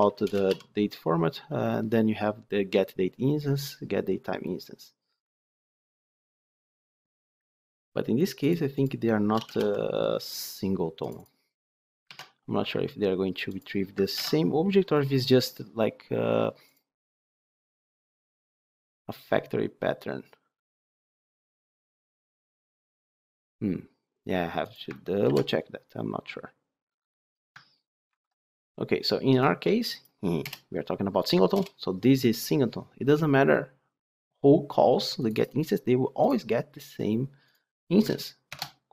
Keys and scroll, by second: 0.2 Return, 12.1 ctrl+q, 13.4 ctrl+q, 14.1 ctrl+b, 25.2 ctrl+b, 38.4 ctrl+shift+F10.